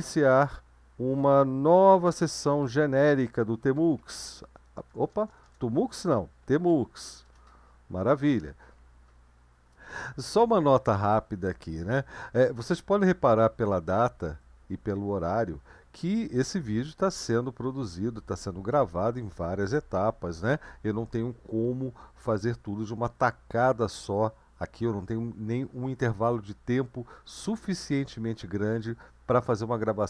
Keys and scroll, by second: 2.5-7.5 typing.